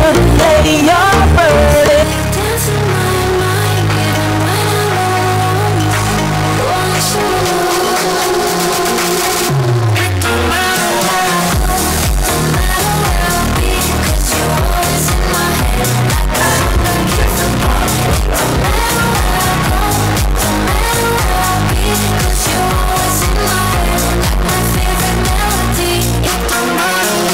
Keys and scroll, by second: 2.6 Page_Down.